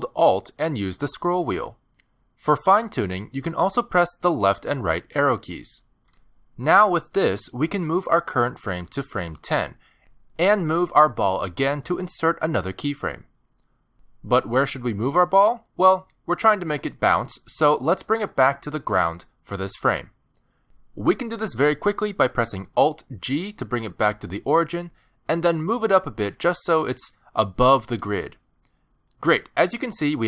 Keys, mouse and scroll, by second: 1.1-2.7 alt+scroll up 24, 2.7-3.8 alt+scroll down 11, 4.5 Right, 4.9 Right, 5.9 Right, 6.1 Right, 6.4 Left, 6.6 Left, 6.8 Left, 7.0 Left, 7.2 Left, 7.4 Left, 7.6 Left, 8.4 Left, 8.8 Left, 9.5 Left, 9.9 Left, 13.3 middle click, 14.0 g, 16.6 middle click, 20.6 middle click, 22.0 alt+g, 23.0 shift+middle click, 23.4 scroll up 4, 23.6 middle click, 24.2 g, 26.3 middle click, 27.5 scroll down 1, 27.6 middle click, 28.8 middle click, 29.2 scroll down 3, 29.5 shift+middle click, 29.8 middle click.